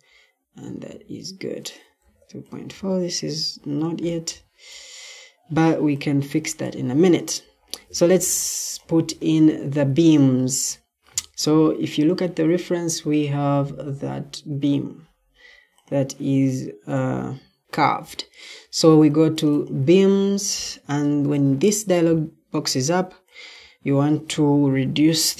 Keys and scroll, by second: 0.5 Escape, 9.5 Escape, 25.0-25.3 typing.